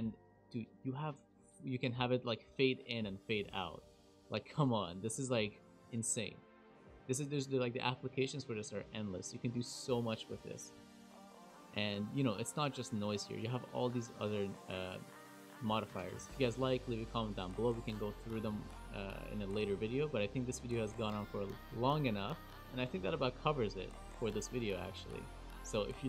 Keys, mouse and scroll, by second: 0.3 click, 2.5 click, 4.7 space, 5.7 space, 12.9 click.